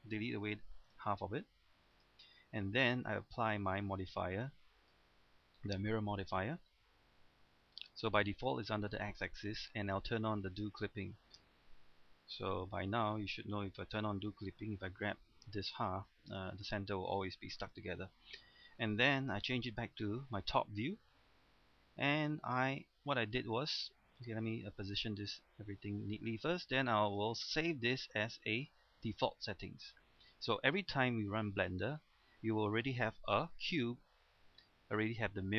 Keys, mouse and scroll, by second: 0.9 x, 2.0 click, 3.4 middle click, 4.8 click, 11.5 middle click, 12.8 a, 14.8 g, 16.2 right click, 18.0 Tab, 18.8 scroll down 1, 19.6 KP_7, 20.1 scroll down 1, 21.1-21.6 scroll up 1, 23.0 middle click, 27.1 click, 32.0 scroll up 1, 32.3 scroll down 1, 32.5 middle click, 33.0-33.7 scroll up 1, 33.7 Tab, 34.1-35.5 middle drag.